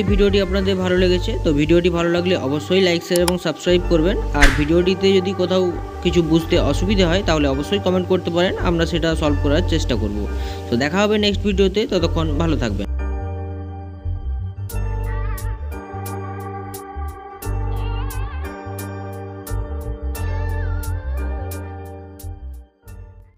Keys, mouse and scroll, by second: 5.7 click, 11.4 click, 15.9-18.5 drag, 20.8-22.9 middle drag.